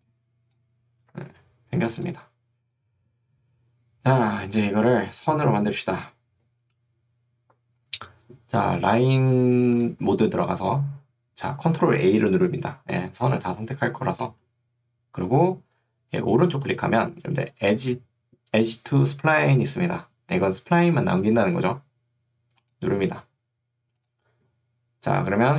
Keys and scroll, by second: 1.2 Escape.